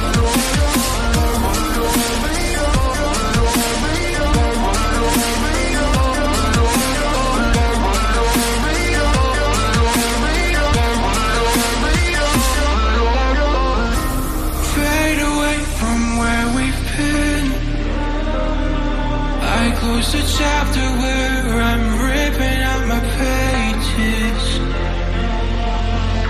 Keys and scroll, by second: 15.9 ctrl+e, 25.4 ctrl+j, 25.9 ctrl+z.